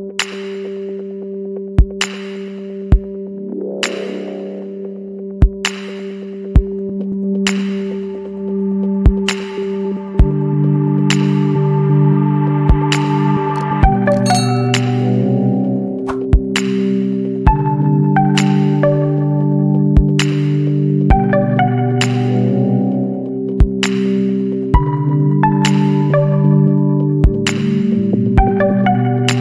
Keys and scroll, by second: 1.7 KP_1, 1.7 KP_5, 2.1 KP_5, 12.5 KP_0, 22.6 ], 22.8 \, 25.1 ], 27.1 KP_0.